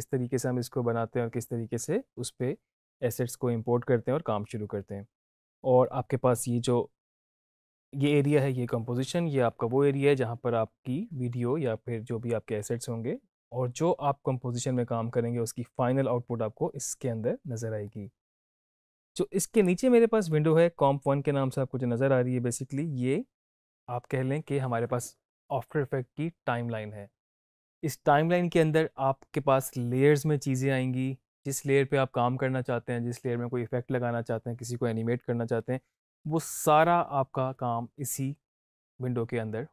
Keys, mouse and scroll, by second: 19.5 click.